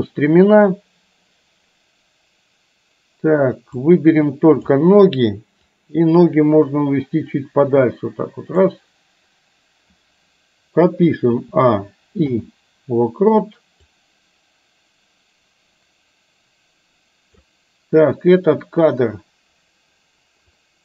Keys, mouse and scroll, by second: 3.8-4.8 drag, 5.9-8.8 drag, 11.3 a, 12.3 i, 14.1-17.6 drag, 20.7 click.